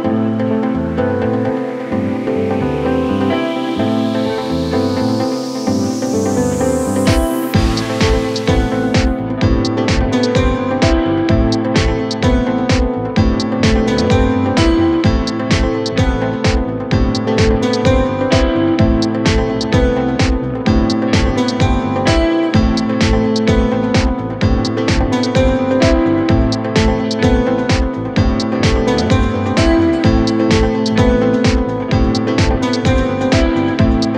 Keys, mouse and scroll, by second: 0.5-4.9 drag, 4.9 g, 5.8-7.4 drag, 7.4-8.5 scroll up 1, 8.6 scroll up 1, 9.3-12.3 drag, 12.3-12.7 scroll down 1, 12.7 click, 13.7-14.8 scroll up 2, 14.8-16.7 drag, 16.7-17.1 scroll down 4, 17.1-19.7 drag, 19.9-21.2 drag, 21.9 click, 23.5 click, 25.2 click, 25.8-26.9 scroll up 6, 26.9-27.3 scroll down 2, 27.3-29.1 drag, 29.7 scroll down 2, 30.1-30.7 scroll up 1, 30.7 click, 31.5 scroll down 4, 31.8-32.5 scroll up 1, 32.5-33.5 drag.